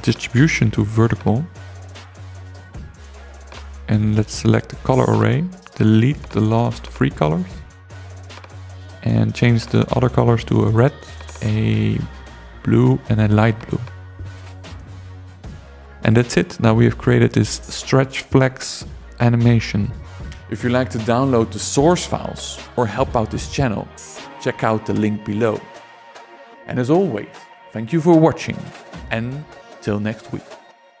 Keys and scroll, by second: 9.8 super+Return, 10.5 super+v, 10.8 super+Return, 11.0 super+c, 11.6 super+v, 12.3 super+Return, 13.9 space.